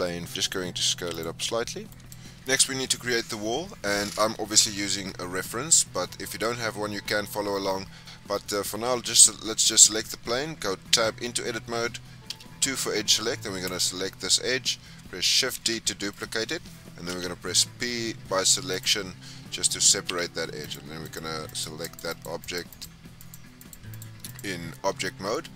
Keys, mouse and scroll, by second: 0.2 scroll up 2, 0.4 s, 1.4 scroll down 4, 1.6 middle click, 2.2-3.0 scroll up 1, 7.9-9.4 scroll up 4, 9.4-10.5 scroll down 1, 10.8 Tab, 12.2 2, 13.6 click, 15.5 shift+d, 17.0 p, 20.0 Tab, 20.6 click, 21.0 click, 21.4 click, 21.8 click, 22.0 click, 22.4 click, 22.6 click, 23.1 click, 23.5 click, 23.8 click, 24.2 click.